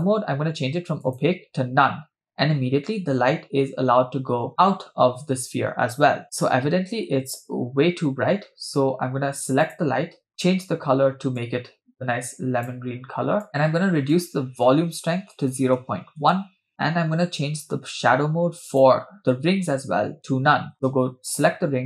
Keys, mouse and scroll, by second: 9.7 click, 14.1-16.4 drag, 18.7 click, 20.2-20.9 scroll down 8, 21.7-21.8 scroll down 2.